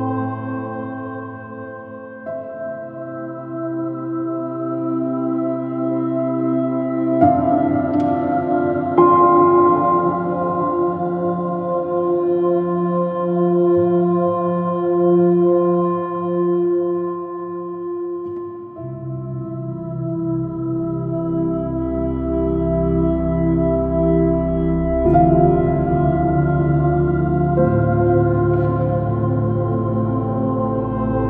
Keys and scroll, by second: 0.5 p, 1.2 super+-, 2.0 super++, 2.2 super+space, 4.8 super+-, 6.4 super+h, 7.7 super+z, 8.1 super+z, 8.6 super+-, 9.0 super+z, 9.7 super+z, 12.3 super++, 12.4 super+space, 13.0 p, 22.1 super+space, 22.3 super+space, 22.3 super++, 22.4 super+space, 28.1 space, 28.6 super+-, 30.9 super+-.